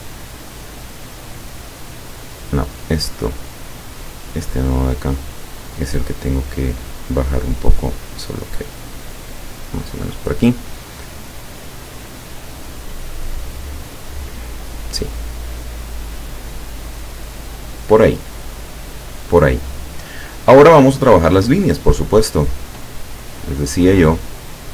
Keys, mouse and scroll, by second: 0.8-2.4 drag, 4.9-7.6 drag, 8.4-10.2 drag, 11.0-14.5 drag, 15.3 click, 16.3 click, 22.3 click.